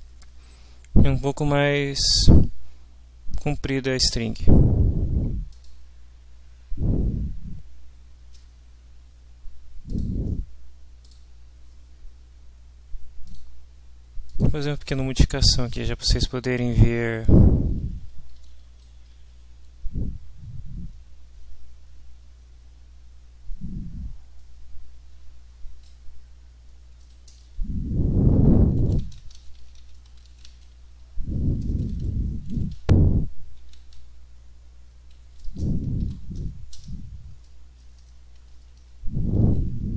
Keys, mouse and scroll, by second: 5.7 click, 10.0 click, 11.0 click, 13.2 click, 14.3 click, 14.8 click, 16.0 Up, 17.3 Down, 18.3 Up, 19.2 End, 27.3 Return, 28.2-31.6 typing, 32.6-33.8 typing, 35.2 Down, 35.5 Return, 36.0 ., 36.7 n, 37.8 BackSpace, 38.8 shift+9.